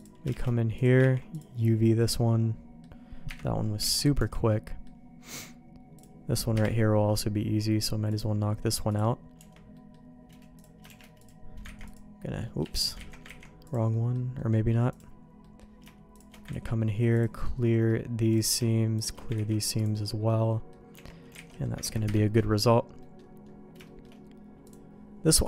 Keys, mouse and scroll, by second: 0.0 click, 0.4 shift+g, 1.2 ctrl+e, 1.6-2.8 middle drag, 3.3 KP_Divide, 3.8 alt+a, 4.2 Tab, 4.5 middle click, 6.0 click, 6.5 KP_Divide, 8.1 click, 9.4 Tab, 9.7 middle click, 10.6 click, 10.9 shift+g, 11.8 ctrl+e, 12.6 Escape, 12.8 middle click, 13.1 ctrl+z, 13.3 ctrl+e, 13.9 middle click, 14.4 middle click, 14.9 click, 15.4 middle click, 16.1 shift+click, 16.5 ctrl+e, 17.4 middle click, 18.3 click, 19.0 shift+click, 19.3 ctrl+e, 20.3 middle click, 20.9 Tab, 21.4 alt+a, 21.5 middle click, 21.8 ctrl+s, 22.1 KP_Divide, 22.1 middle click, 23.0 middle click, 23.8 shift+middle click.